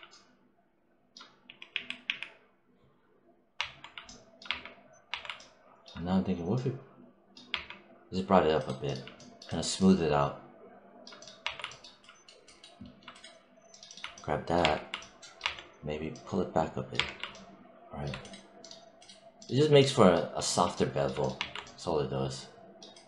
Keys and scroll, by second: 1.3 z, 3.4 1, 4.3 3, 7.3 3, 11.3 1, 14.5 3, 15.2 1.